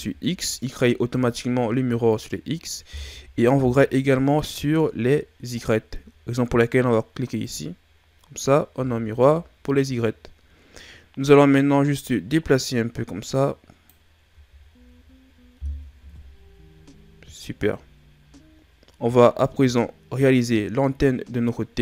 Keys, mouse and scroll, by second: 1.4-4.4 ctrl+scroll down 2, 4.4 KP_3, 5.6 ctrl+scroll down 3, 7.3 click, 8.0 scroll down 1, 8.8-9.3 shift+scroll up 5, 11.5 click, 14.3 a, 14.8-15.5 scroll down 4, 16.1 KP_1, 17.3-18.3 shift+scroll up 5, 18.3 scroll up 2, 19.7-21.8 middle drag.